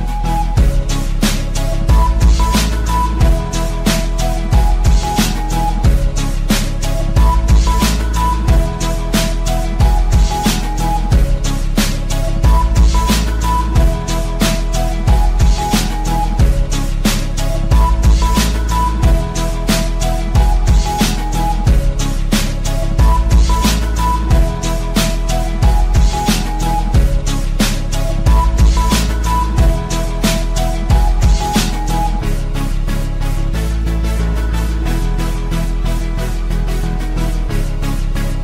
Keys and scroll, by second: 30.7 c, 36.6 shift+Page_Up.